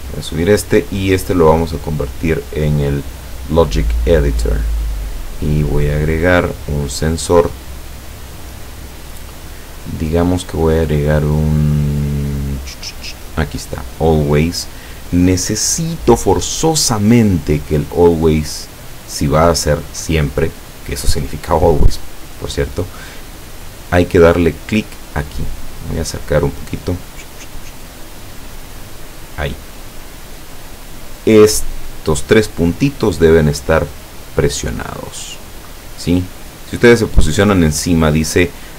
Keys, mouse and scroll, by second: 1.7 click, 3.3 click, 6.0-6.4 scroll up 1, 7.2-8.5 drag, 10.8 click, 13.7 click, 25.1-25.6 scroll up 1, 26.2 click, 27.1-27.8 scroll up 1, 28.4 click, 29.1 scroll up 2, 29.8 click, 34.9 click.